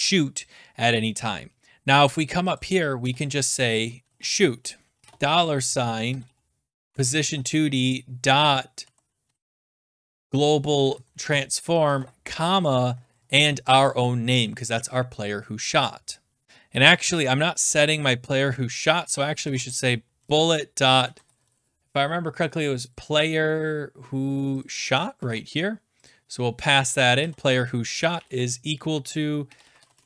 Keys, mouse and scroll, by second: 1.0-2.4 scroll up 1, 2.4 scroll, 2.6 click, 3.0 Return, 3.7-13.7 typing, 6.9 Tab, 16.3 middle click, 16.4 ctrl+s, 17.9 click, 18.9 Return, 19.1-21.9 typing, 22.9 click, 23.4-24.6 scroll down 5, 24.6 click, 24.7 click, 24.7 scroll, 25.2 ctrl+c, 26.0 middle click, 26.1 click, 26.5 middle click, 26.6-26.9 scroll down 5, 27.0 click, 27.1 click, 27.2 ctrl+v, 28.1 =, 29.2-30.0 typing.